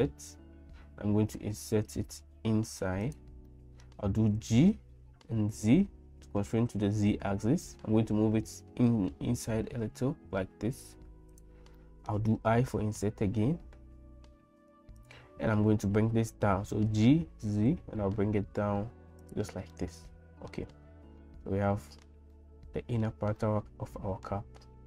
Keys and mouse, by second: 3.5 middle click, 4.3 g, 11.8 middle click, 12.4 i, 16.9 g, 19.7-20.8 middle drag, 21.2 middle click, 22.9 middle click, 23.4 middle click.